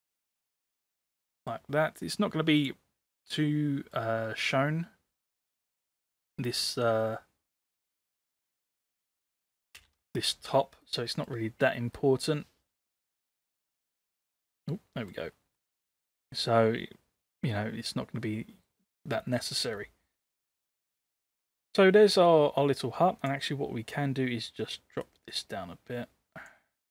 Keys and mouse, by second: 3.2-4.0 middle drag, 6.8-8.6 drag, 9.2 ctrl+c, 9.8 ctrl+v, 10.9-11.4 middle drag, 12.1-13.4 middle drag, 14.3-15.3 middle drag, 15.7 middle click, 21.0 middle click, 25.1-26.5 drag.